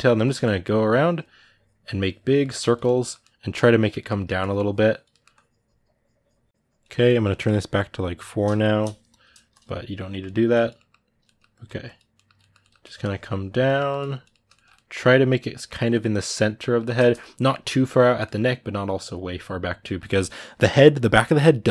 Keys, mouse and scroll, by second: 0.0 middle click, 0.2-2.2 drag, 2.2 middle click, 2.4 click, 2.6-4.1 middle drag, 4.1 click, 4.9 middle click, 5.1-10.5 drag, 10.5 middle click, 11.3 ctrl+click, 11.9 ctrl+middle click, 12.6 click, 13.5 middle click, 13.7 click, 14.1-21.7 ctrl+middle drag.